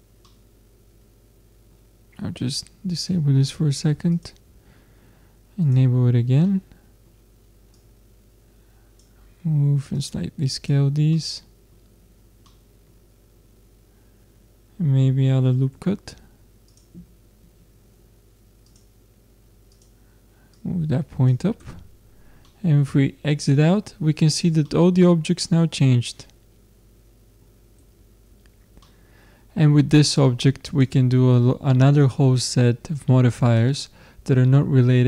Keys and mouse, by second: 3.0-6.5 drag, 6.5-8.2 middle drag, 8.2-9.5 drag, 10.0-11.2 drag, 11.2-16.1 middle drag, 15.7 ctrl+r, 18.7-22.5 drag, 21.6 Tab, 22.5 middle click, 24.4 middle click, 26.5-28.9 middle drag, 27.8 Tab, 28.4 Tab, 30.6-32.6 drag.